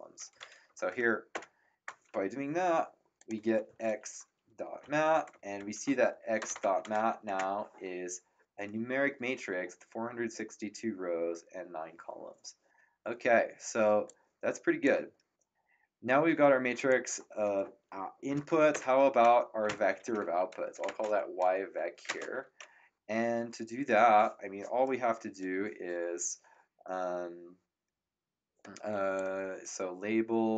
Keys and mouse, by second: 1.3 Return, 3.1 click, 4.5-7.4 typing, 14.0 click, 16.7 click, 18.7 Return, 19.0-22.0 typing, 29.1 click.